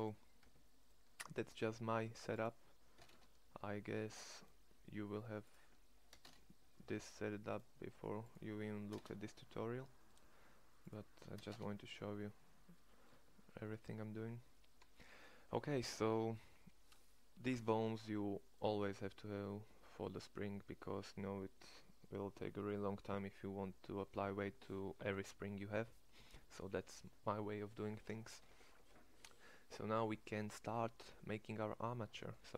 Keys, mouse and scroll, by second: 0.4 Tab, 13.0 Tab, 31.5 click, 31.8 middle click.